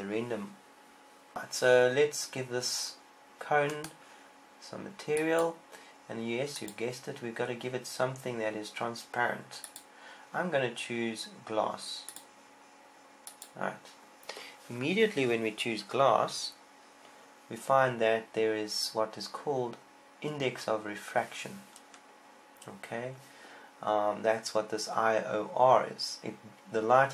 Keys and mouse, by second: 1.4 z, 1.4 a, 7.5-27.1 drag.